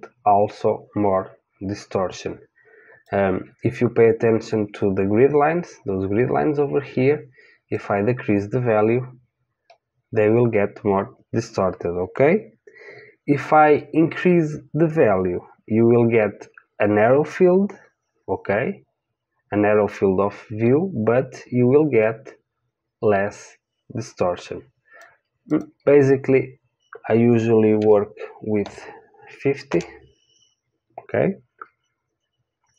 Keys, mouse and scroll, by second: 7.7 click, 25.5-29.7 drag.